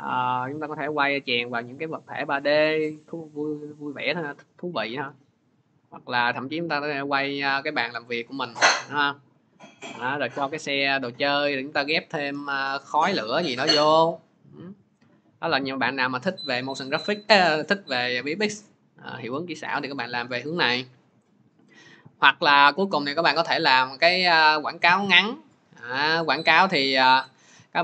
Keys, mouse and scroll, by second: 2.4 click, 3.3 click, 3.6 click, 12.6 click, 13.5 click, 15.8 click, 19.5 click, 21.5 click, 21.6 click.